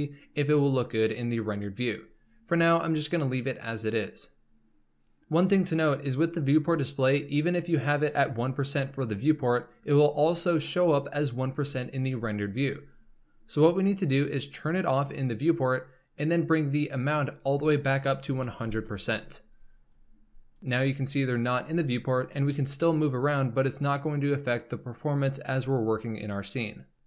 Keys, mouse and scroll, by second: 1.9-5.1 scroll down 2, 16.1 click, 17.3-18.7 drag, 18.7 KP_0, 20.6-21.3 scroll up 3, 21.3 z, 22.3 scroll down 1, 22.4-25.6 middle drag.